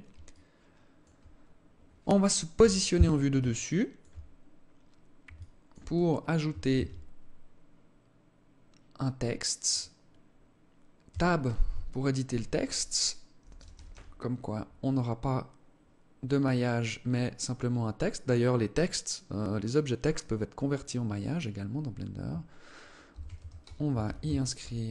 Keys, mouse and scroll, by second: 2.1 KP_7, 3.2 alt+shift+click, 3.8 scroll down 6, 4.4-4.8 scroll up 4, 4.9 alt+shift+click, 5.5 scroll up 1, 5.8 scroll down 1, 6.3 shift+a, 9.9-10.6 scroll up 1, 10.6 Tab, 10.6-11.4 scroll up 1, 11.4 alt+shift+click, 13.0 BackSpace, 13.2 BackSpace, 13.4 BackSpace, 13.5 BackSpace, 22.6-24.9 typing.